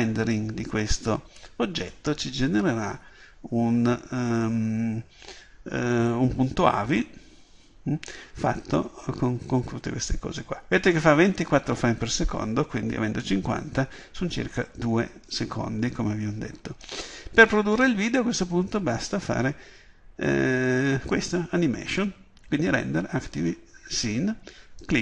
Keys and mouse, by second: 16.9-25.0 drag.